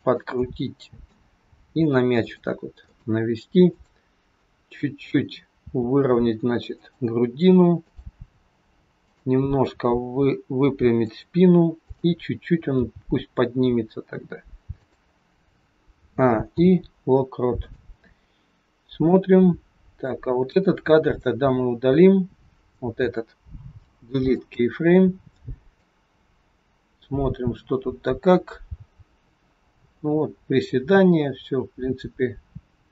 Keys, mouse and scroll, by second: 0.4 middle click, 1.5 r, 3.3 middle click, 3.8 click, 5.5 r, 7.8 click, 9.6 r, 11.8 click, 12.6 g, 15.9 a, 16.4 i, 19.0 click, 20.4 click, 23.7 Delete, 25.7 click.